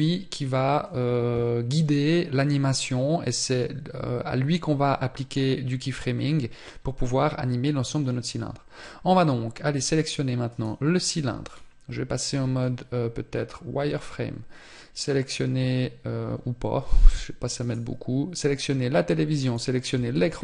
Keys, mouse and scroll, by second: 19.5-19.8 scroll up 6.